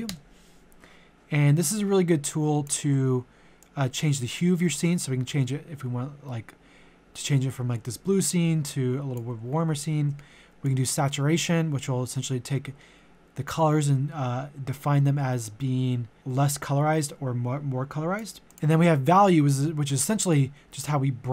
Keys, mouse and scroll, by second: 0.1 Return, 1.6-9.5 drag, 9.7 ctrl+z, 10.7-21.3 drag.